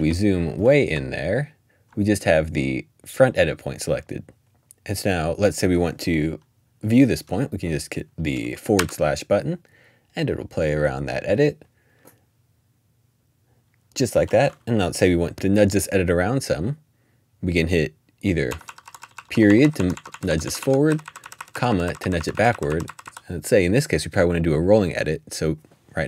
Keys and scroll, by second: 0.0 Up, 1.1 scroll up 1, 8.8 /, 18.2-23.8 typing.